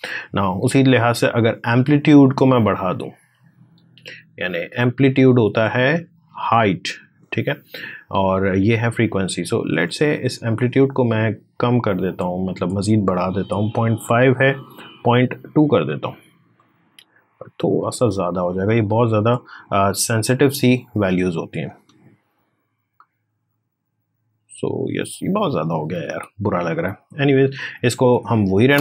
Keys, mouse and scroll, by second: 1.1-3.1 drag, 3.1-4.3 scroll down 1, 4.3 click, 6.9 click, 9.7-14.6 drag, 15.2 2, 16.3-21.5 drag, 21.5 space, 25.6 space, 26.6 click, 27.7 ctrl+z.